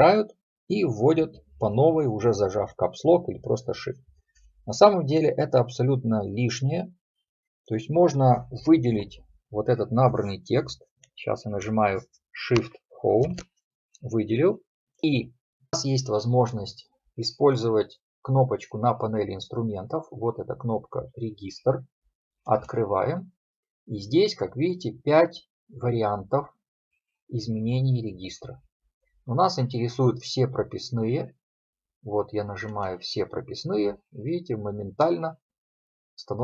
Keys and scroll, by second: 13.3 shift+Home.